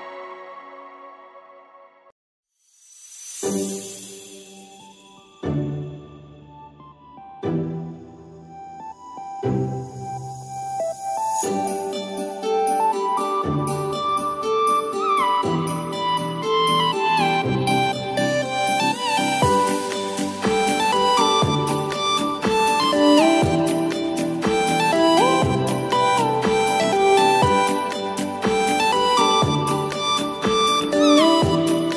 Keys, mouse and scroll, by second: 1.2-4.3 drag, 8.0 click, 10.0-15.6 drag, 17.1 alt+Num_Lock, 17.1 click, 20.0-23.0 drag, 23.9 click, 28.6 click, 30.0 click.